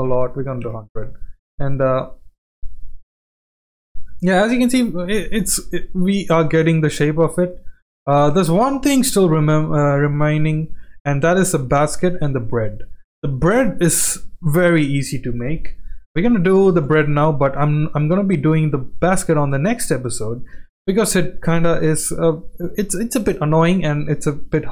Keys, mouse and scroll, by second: 0.4 KP_0, 1.9 g, 3.8 shift+middle drag, 4.1 scroll down 1, 4.5 click, 5.4-7.5 middle drag, 7.9-8.2 shift+middle drag, 8.5-9.0 middle drag, 9.2-9.6 shift+middle drag, 10.0-10.4 shift+middle drag, 10.7 middle click, 11.4 shift+middle click, 12.1 middle click, 14.4-14.7 shift+middle drag, 15.5 KP_1, 16.8 shift+right click, 17.2 shift+middle click, 18.1 z, 19.8-20.1 shift+middle drag, 21.1-21.5 shift+middle drag, 22.8-23.3 shift+middle drag, 23.7 shift+a.